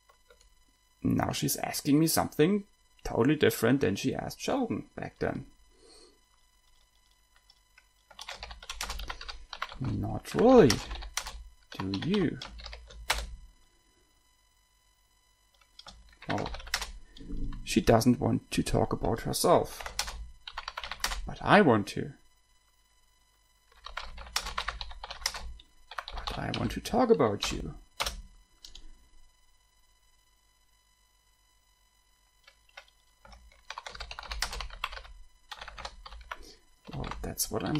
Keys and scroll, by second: 8.3-13.0 typing, 13.4 Return, 16.2-17.4 typing, 20.0-21.5 typing, 23.7-27.7 typing, 28.3 Return, 33.9-37.7 typing.